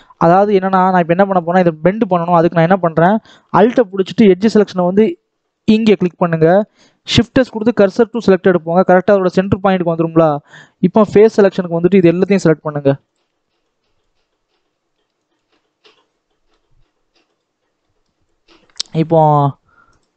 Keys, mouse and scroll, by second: 0.0 alt+a, 0.5 scroll up 1, 1.2 click, 2.0 alt+a, 5.6 alt+click, 7.8 shift+s, 8.1-11.2 middle drag, 11.2 click, 13.1 click, 15.2 shift+click, 15.4-17.2 middle drag, 17.2 click, 17.7 shift+middle click, 18.1-19.9 scroll down 1, 19.9-20.1 drag.